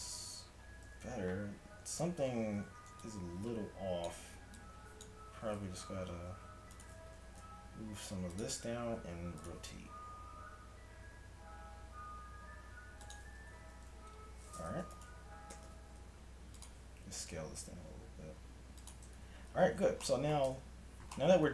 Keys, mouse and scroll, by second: 0.4 a, 0.9 z, 2.0 a, 2.7 z, 4.7 ctrl+click, 5.8 g, 7.1 g, 8.9 r, 9.8 r, 13.4 a, 13.6 z, 15.0-16.6 drag, 15.6 g, 17.6 s, 19.1 a, 19.2 z, 19.8 z, 20.6 Tab.